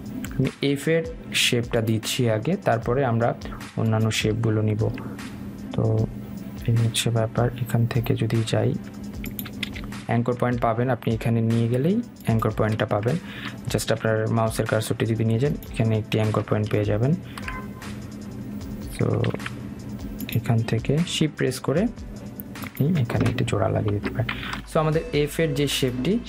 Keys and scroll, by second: 13.8 Escape, 19.9 ctrl+z, 24.5 Escape.